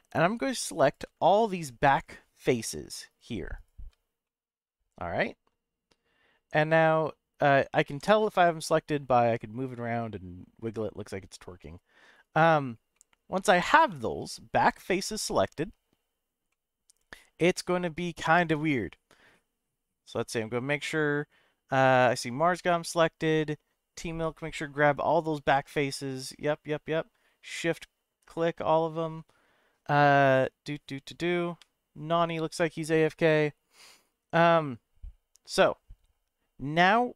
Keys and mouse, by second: 1.5 shift+click, 2.1 shift+click, 2.5 shift+click, 4.2-6.7 middle drag, 7.9 g, 12.1 right click, 12.9-14.2 middle drag, 16.5-17.8 middle drag, 34.5-35.5 middle drag.